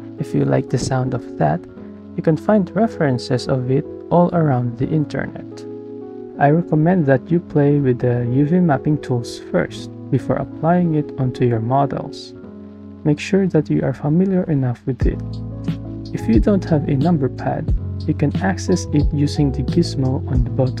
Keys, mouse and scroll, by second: 3.5 KP_4, 7.3 shift+click, 9.6 space, 14.8 KP_8, 17.0 shift+click, 17.5 shift+click.